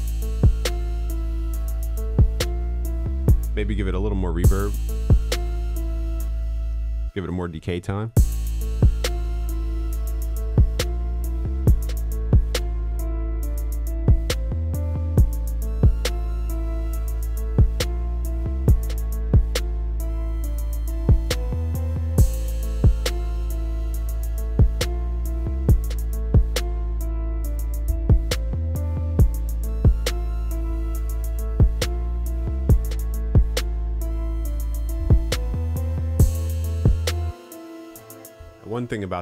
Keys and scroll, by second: 20.6 ctrl+s.